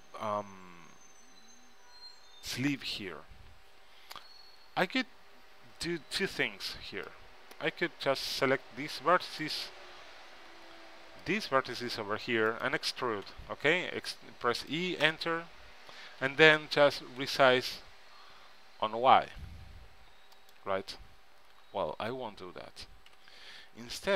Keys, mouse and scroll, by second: 6.4 c, 9.6-11.4 right drag, 10.6 c, 12.7-14.1 right drag, 13.4 e, 14.1 click, 15.1 Return, 16.3 s, 21.6 ctrl+z, 23.2 a, 24.0 b.